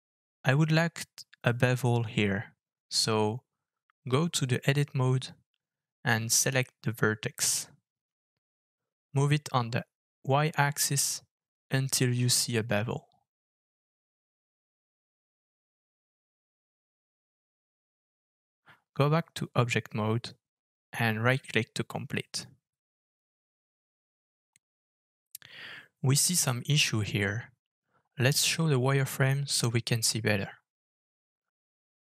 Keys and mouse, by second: 5.5 Tab, 7.5 shift+middle click, 8.3 middle click, 9.0 shift+middle click, 10.5 click, 11.2 middle click, 12.9 g, 19.2-20.3 middle drag, 21.1 Tab, 24.2-24.7 middle drag, 26.0 Tab, 27.5 Tab, 28.4-29.2 drag, 30.9 alt+f.